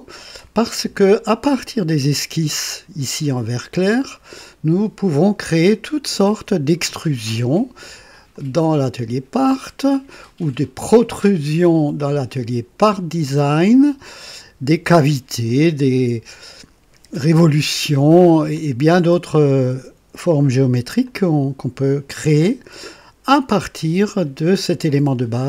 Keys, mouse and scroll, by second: 0.9-6.6 ctrl+alt+drag, 8.3 click, 10.4 click, 11.6 click, 13.5 click, 18.5-19.6 drag, 21.1-25.4 ctrl+alt+drag.